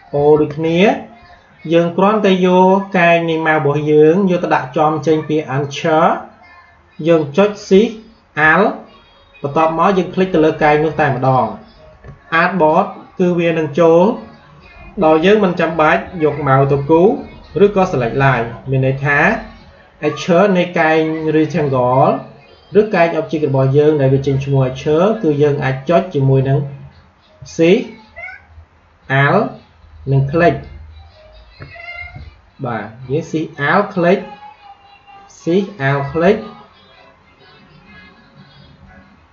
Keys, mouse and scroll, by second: 0.0 shift+o, 7.6 shift+o, 11.0 alt+shift+click, 27.3 shift+Num_Lock, 30.3 alt+shift+click, 33.7 alt+shift+click.